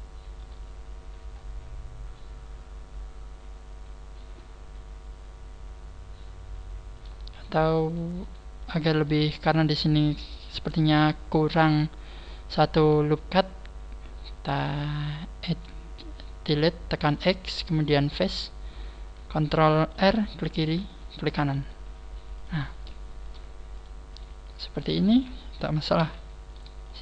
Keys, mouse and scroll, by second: 0.6 scroll down 3, 1.2 scroll up 1, 1.3 scroll down 2, 1.4 scroll up 2, 3.4 scroll up 2, 6.9 right click, 7.3 shift+right click, 7.8 shift+right click, 8.2 shift+right click, 8.6 shift+right click, 18.1 x, 20.8 ctrl+r, 21.5 g, 23.2 click, 23.2 right click, 23.8 shift+right click, 24.1 shift+right click, 24.6 shift+right click, 26.0 f, 26.5 shift+right click, 26.8 shift+right click.